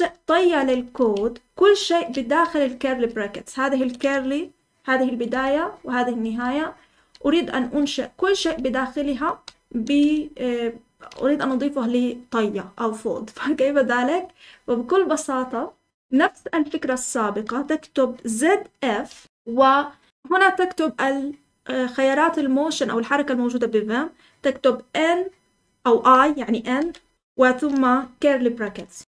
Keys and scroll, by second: 0.0-2.8 typing, 5.2-10.7 typing, 14.1 typing, 18.8-19.7 typing, 26.7 typing, 28.6-29.0 typing.